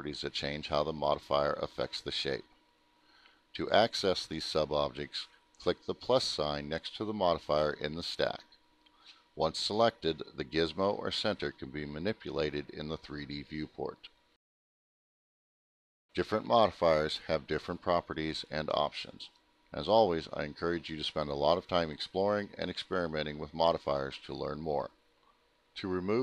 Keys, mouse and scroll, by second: 4.4 click, 6.4 click, 8.8 click, 14.7 ctrl+z, 16.5 click, 25.9 click.